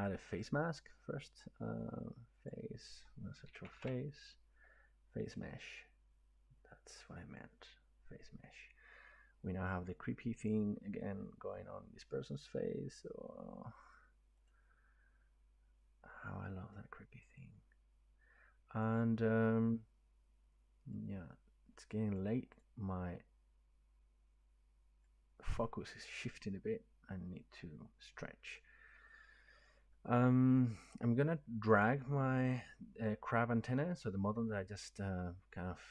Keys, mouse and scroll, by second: 2.5 click, 3.5 typing, 5.5 click, 14.5 click, 19.1 click, 22.1 click, 22.6 click.